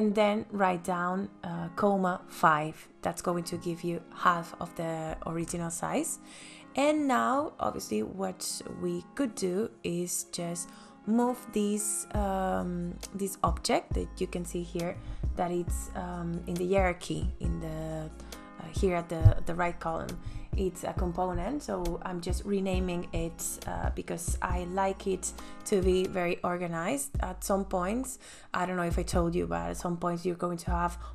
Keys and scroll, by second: 3.8 space, 18.7-20.4 typing, 21.2 Return, 28.2-29.5 typing.